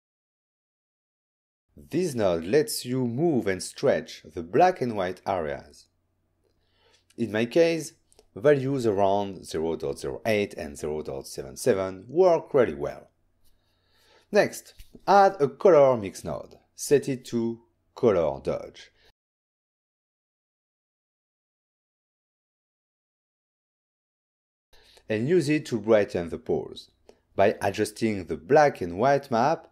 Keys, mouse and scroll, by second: 0.9 click, 3.2 shift+click, 5.0 shift+click, 9.2 click, 9.5 typing, 10.2 Tab, 10.8-11.7 typing, 11.9 Return, 13.7 shift+middle click, 14.0 ctrl+middle click, 14.4-14.7 ctrl+scroll up 2, 15.2 scroll down 1, 15.5 scroll up 1, 15.8-17.1 typing, 16.0 click, 17.4 Return, 18.1 click, 18.5 click, 19.9 click, 20.3 click, 21.4 click, 21.9 click, 22.4 click, 24.2 ctrl+shift+click, 25.1 click.